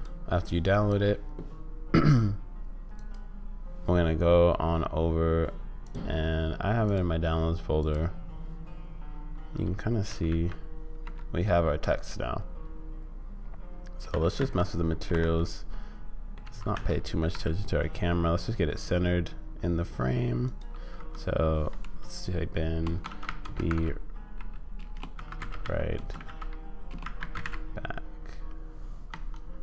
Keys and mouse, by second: 3.1 click, 10.1 g, 11.9-14.1 drag, 14.1 g, 15.4 click, 16.4 g, 20.9 Tab, 21.9-27.4 typing, 29.1 Tab.